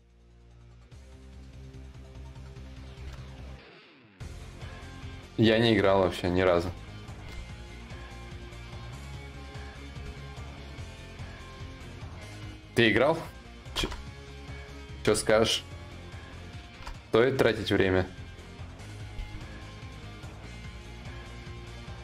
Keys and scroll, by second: 2.6 ctrl+z, 6.9 ctrl+z, 14.5 ctrl+z, 16.3 ctrl+z, 18.7 ctrl+z.